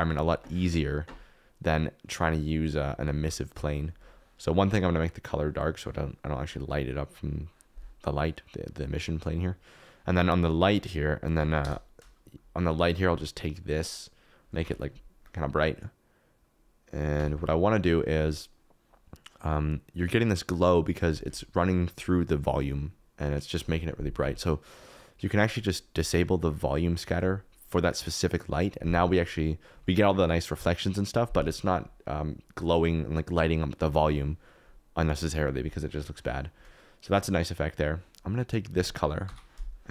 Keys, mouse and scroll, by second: 2.9 g, 3.1 y, 3.3 y, 11.6 KP_0, 13.0 g, 25.9 click, 39.2 ctrl+c.